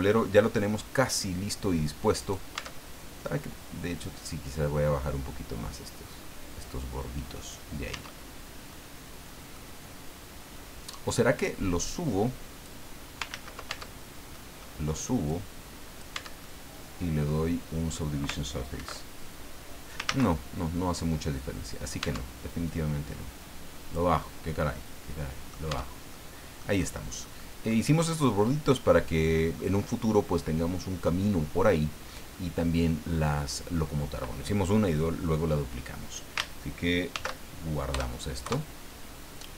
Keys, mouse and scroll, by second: 2.2 right click, 2.5-4.2 middle drag, 2.5 Tab, 4.2-7.7 drag, 7.9 Tab, 8.7-9.7 middle drag, 9.8-10.4 scroll up 2, 11.1-12.8 drag, 13.3 ctrl+z, 13.7 ctrl+Tab, 14.3 middle click, 15.2 click, 16.1 Tab, 16.4-18.1 middle drag, 18.8 ctrl+2, 20.1 ctrl+z, 22.0 Tab, 22.7-24.1 drag, 24.2-25.7 middle drag, 25.6 click, 25.7 Tab, 26.1 click, 26.7 scroll down 2, 27.2 middle click, 31.7 middle click, 32.3 scroll up 2, 33.1 scroll up 2, 33.7 scroll down 2, 37.1 ctrl+shift+s, 37.9 KP_Add, 38.4 KP_Enter.